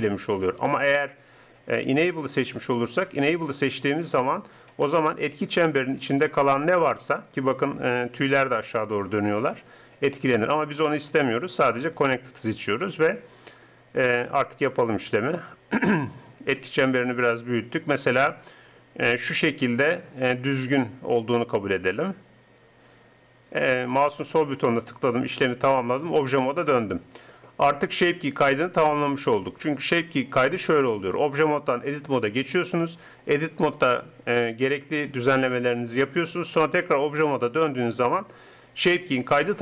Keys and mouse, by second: 0.9-2.7 drag, 3.5-5.5 drag, 6.3 r, 15.3 r, 25.9 Tab, 34.7 Tab, 36.5 Tab.